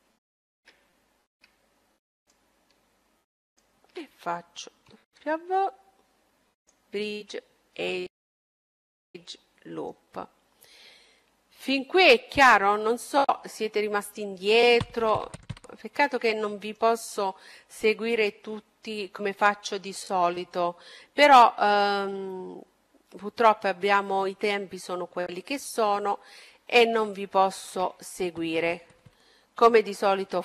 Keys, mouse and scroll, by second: 0.8-2.8 middle drag, 2.1-5.3 right drag, 4.8 w, 7.1-9.6 middle drag, 11.6-13.5 middle drag, 13.5-14.0 scroll up 1, 14.0-17.9 middle drag, 24.5-25.6 scroll up 1, 25.6 middle click, 28.6 a.